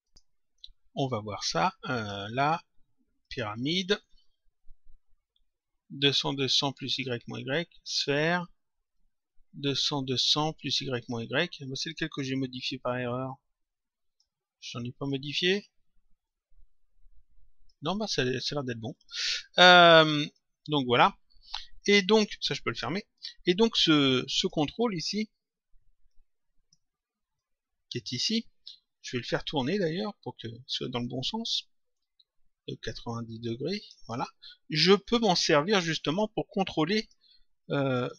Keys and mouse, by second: 1.3 click, 3.1 click, 4.7 click, 7.7 click, 8.9 click, 11.7 click, 14.9 click, 16.2 click, 18.9 click, 20.2 click, 22.6 click, 24.3 click, 26.0 click, 27.3 click, 29.4 click, 30.7 click, 31.9 shift+click, 34.9 click, 36.1 click, 37.8 click.